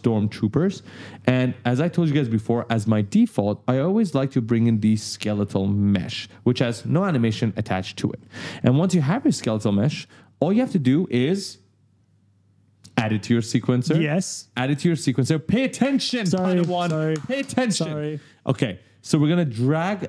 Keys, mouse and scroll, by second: 1.8-2.1 scroll down 1, 2.5-2.8 scroll down 1, 4.9 click, 7.7 right click, 7.8 w, 8.1 a, 19.4 click.